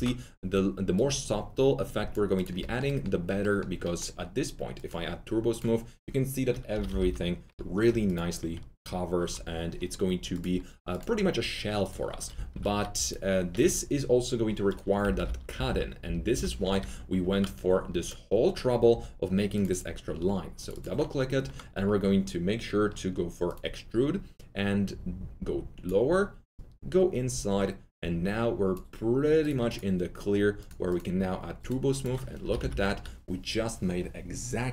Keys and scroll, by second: 6.7 F3, 6.9 F4, 12.3 F3, 12.4 typing, 14.9-17.2 typing, 32.4 F3, 32.5 F3, 32.6 F4.